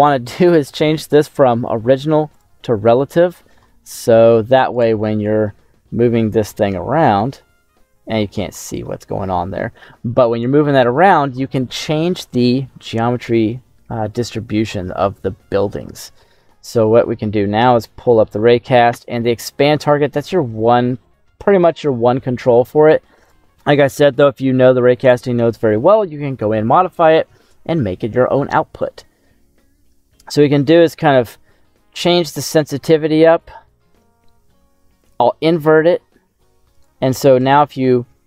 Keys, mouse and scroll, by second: 0.6-1.1 scroll up 2, 2.3 click, 3.8 middle click, 4.2-4.6 scroll down 2, 4.6 right click, 5.3 g, 6.4 z, 8.4 right click, 8.7 middle click, 10.2 right click, 16.7 middle click, 17.3-18.2 scroll up 7, 18.2 middle click, 24.4-27.5 scroll down 1, 28.7-33.3 drag, 34.9 click, 36.0 middle click, 36.7 right click, 37.3 g, 37.7 z.